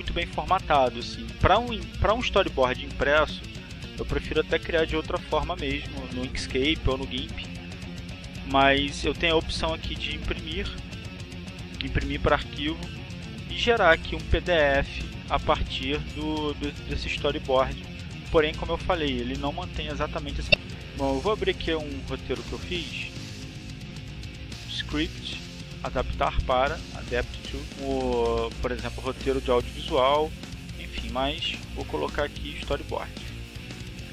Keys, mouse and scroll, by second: 4.0 click, 9.0 click, 10.0 click, 11.5 click, 18.7 click, 21.8 click, 25.8 click, 29.9 click, 32.6-34.1 drag.